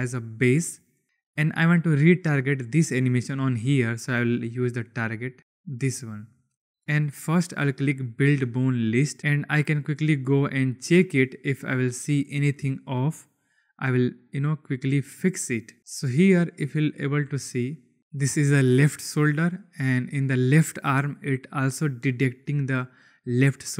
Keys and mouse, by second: 0.7 click, 4.8 click, 5.6 click, 8.2 click, 15.7 click, 16.9 click.